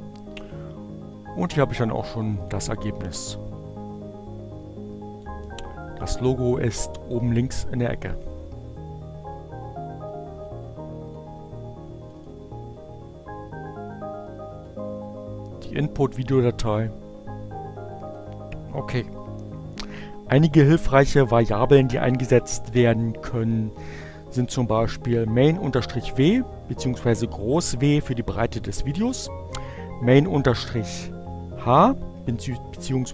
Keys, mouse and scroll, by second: 2.2 click, 3.7 click, 4.1-6.0 drag, 8.9 click, 14.4 click, 15.1 click, 16.3 click, 18.9 click, 23.0 click, 27.0 click.